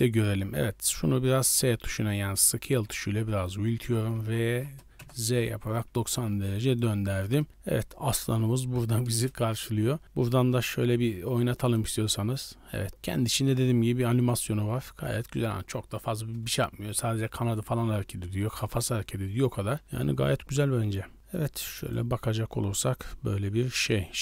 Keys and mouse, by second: 0.8 s, 2.6 s, 3.9 r, 6.1 s, 7.3 shift+middle drag, 7.7-8.5 middle drag, 9.2 KP_0, 11.6 click, 21.4 click, 21.9-24.2 drag.